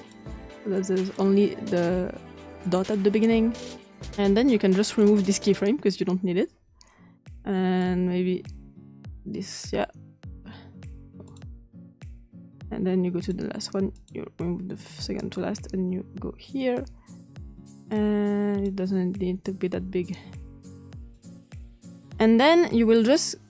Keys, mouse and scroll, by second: 1.1 click, 4.1 click, 6.1 click, 8.9 click, 9.5 click, 11.5 click, 12.5 click, 13.7 click, 14.2 click, 15.1 click, 16.9 click, 19.1 click, 20.5-21.7 drag, 22.9 click.